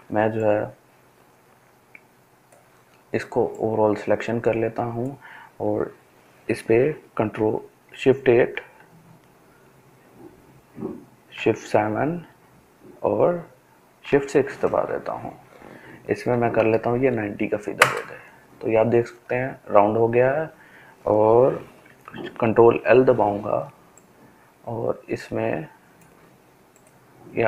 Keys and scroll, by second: 6.0 shift+F8, 6.5 shift+F8, 10.0 shift+F7, 12.6 shift+F6, 15.0 typing, 16.4 Return, 21.3 ctrl+l.